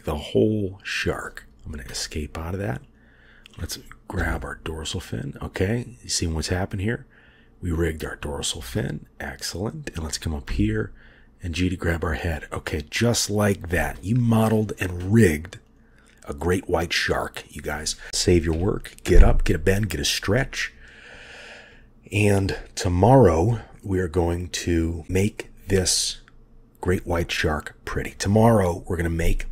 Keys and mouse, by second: 2.9 click, 4.3 g, 10.6 g, 15.7 click, 18.4 ctrl+s.